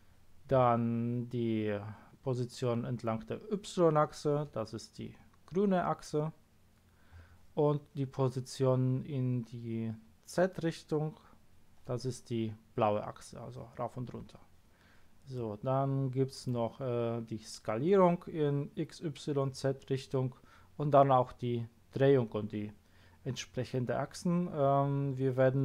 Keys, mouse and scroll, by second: 15.3-16.5 middle drag.